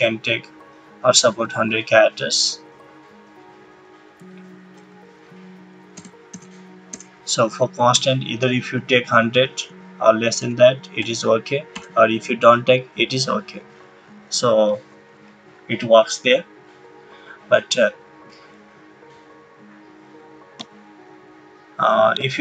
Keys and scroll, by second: 5.9 BackSpace, 8.5-10.3 typing.